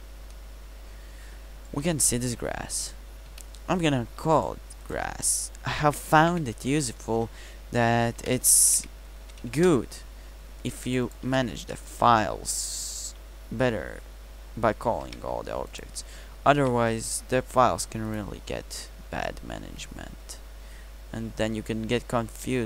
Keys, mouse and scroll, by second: 3.3 KP_Decimal, 6.7 s, 15.1 ctrl+c, 16.6 ctrl+v, 20.0 n.